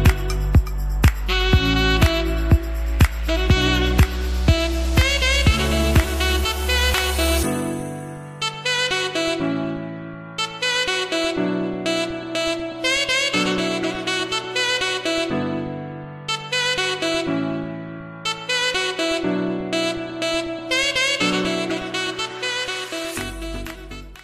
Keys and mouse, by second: 4.7-5.3 drag, 14.2 z, 19.0-22.1 middle drag.